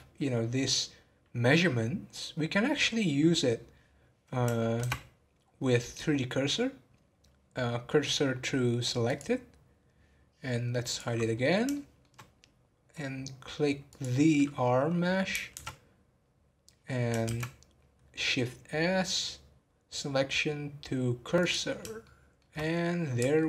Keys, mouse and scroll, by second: 2.2-4.8 middle drag, 4.8 shift+s, 10.8 click, 11.2-11.7 scroll down 2, 11.7-13.8 shift+middle drag, 13.8 click, 15.5 shift+a, 22.0-23.4 shift+middle drag.